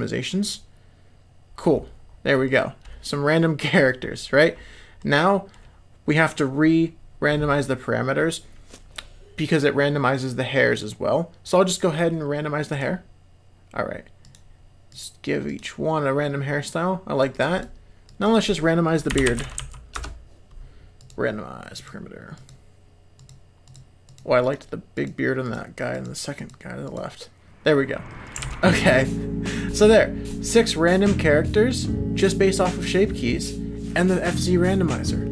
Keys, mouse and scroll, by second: 0.4 click, 2.4-3.7 middle drag, 5.0-5.5 middle drag, 12.9 click, 14.2 click, 14.9 click, 15.4 click, 17.3-20.5 drag, 21.0 click, 21.7 click, 22.3 click, 23.1 click, 23.6 click, 24.0 click, 24.4 click, 24.9 click, 25.4 click, 25.9 click, 26.3 click, 26.8 click, 28.1 middle click, 28.4 alt+a, 28.7-29.5 middle drag, 29.7 middle click, 30.3 middle click, 31.2-32.8 middle drag.